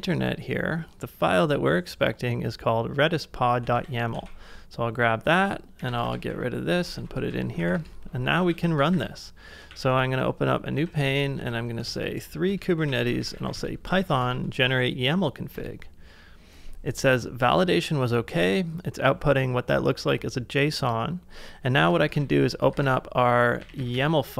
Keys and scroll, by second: 3.8 super+c, 4.1 super+Tab, 5.5-7.2 typing, 7.3 ctrl+c, 7.4 ctrl+c, 7.5 ctrl+c, 7.7 Return, 8.6 ctrl+a, 8.9-13.9 typing, 9.8 ctrl+a, 12.0 Tab, 12.5 Return, 15.5 Return, 22.1 ctrl+a, 22.7 ctrl+w.